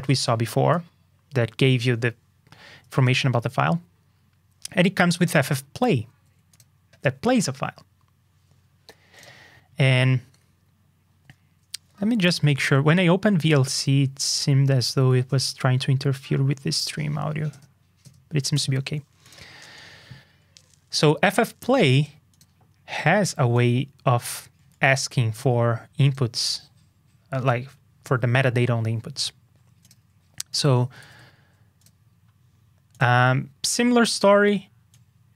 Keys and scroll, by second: 6.1 super+c, 31.0 super+c.